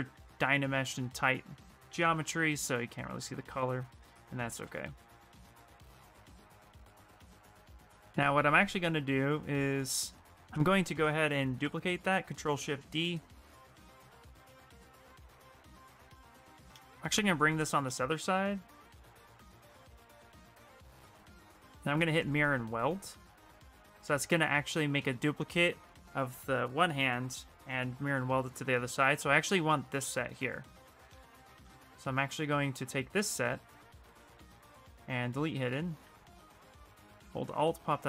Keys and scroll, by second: 2.2 shift+f, 4.3 f, 4.6 f, 5.1 f, 11.4 ctrl+shift+d, 12.8 w, 17.5 shift+f, 18.9 q, 23.0 space, 24.2 shift+f, 24.7 shift+f, 30.0 ctrl+space, 35.4 w.